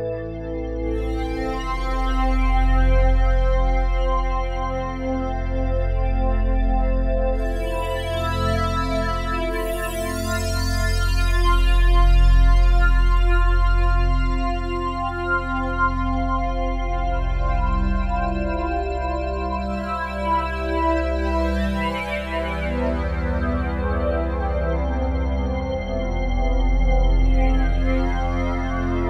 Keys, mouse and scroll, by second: 0.2 click, 1.2-1.6 typing, 3.1 click, 6.8 g, 10.5-13.4 drag, 13.4 Tab, 14.0 Tab, 15.4 click, 18.0 click, 19.3 ctrl+alt+click, 19.8 alt+shift+click, 20.3 ctrl+alt+click, 23.7 1, 24.4-27.5 ctrl+alt+drag, 27.5 g.